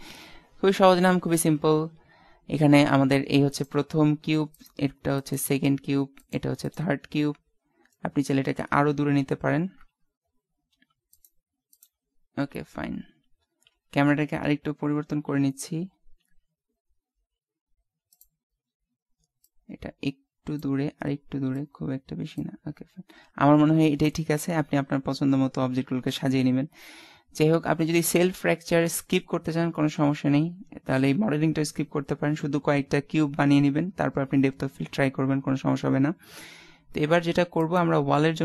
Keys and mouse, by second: 1.0 click, 3.8 right click, 8.0 middle click, 9.8 KP_0, 11.3-13.0 right drag, 13.7 shift+f, 19.5-21.2 drag, 37.6-38.4 right drag.